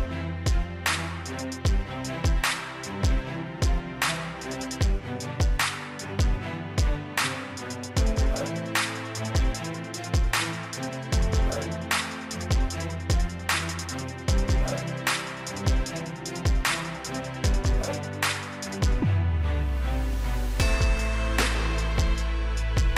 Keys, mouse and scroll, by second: 2.7 right click, 3.8 click, 7.1 scroll down 1, 8.9-9.4 scroll up 1, 13.0 5, 13.9 Return, 15.3 click, 20.7 typing, 21.9 Return.